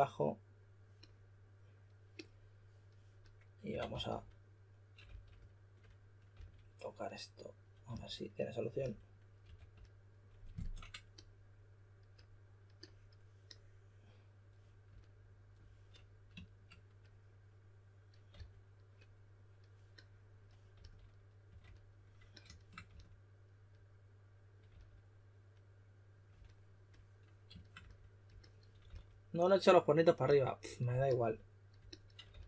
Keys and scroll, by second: 0.0-0.2 typing, 3.4-5.0 typing, 6.3 s, 7.8 typing, 9.4 2, 18.3 s, 20.7-22.8 typing, 24.6 typing, 28.8 s, 32.2 s.